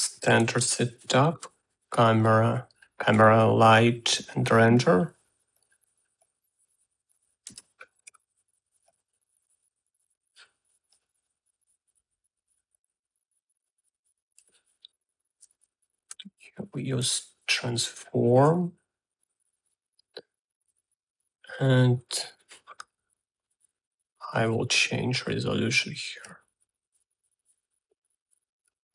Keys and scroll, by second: 1.1 Tab, 1.7-2.6 typing, 3.9 Tab, 5.1-6.0 typing, 8.3 Tab, 8.4-9.4 typing, 16.9 r, 17.5 a, 19.1 1, 27.4 2.